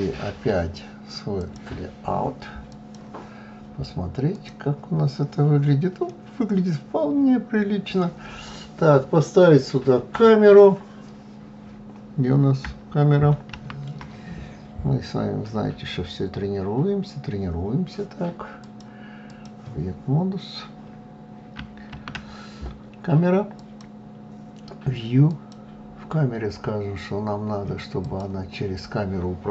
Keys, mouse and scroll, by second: 0.0 click, 1.4 click, 3.1 click, 4.7-18.1 middle drag, 18.1-22.4 drag, 22.4 shift+a, 26.4 click.